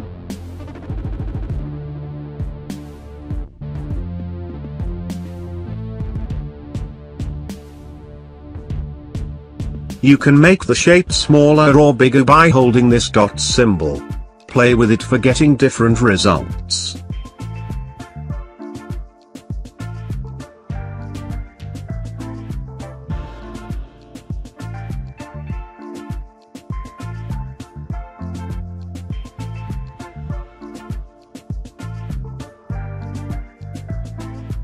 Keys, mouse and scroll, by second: 25.8-28.3 drag, 28.3-32.0 drag, 34.5-34.6 drag.